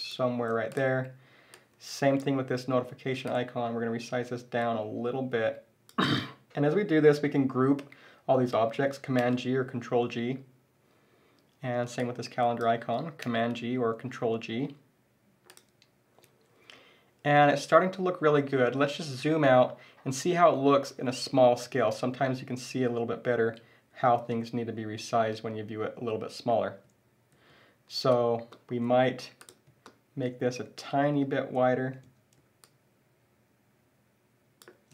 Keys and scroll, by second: 9.2 super+g, 13.2 super+g.